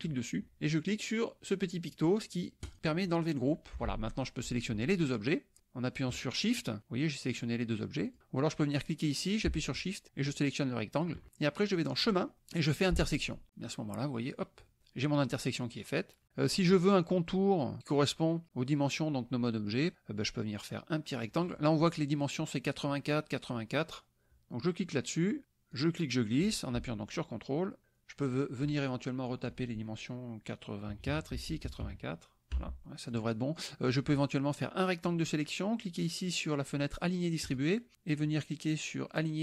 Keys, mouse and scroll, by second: 2.6 click, 5.6 shift+click, 8.8 click, 10.0 shift+click, 11.9 click, 13.0 click, 14.3 click, 24.8 click, 25.8-27.8 drag, 29.3 click, 30.9 KP_8, 31.3 Tab, 31.7 KP_8, 31.8 KP_4, 32.6 Tab, 32.8 click, 33.8-35.3 drag, 37.4 click.